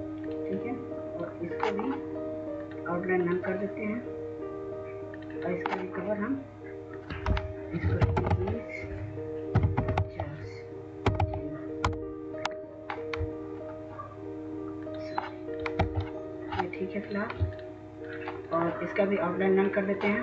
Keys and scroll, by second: 0.0-0.1 typing, 8.0 typing, 9.3-11.6 typing, 11.9 Return, 15.7 typing.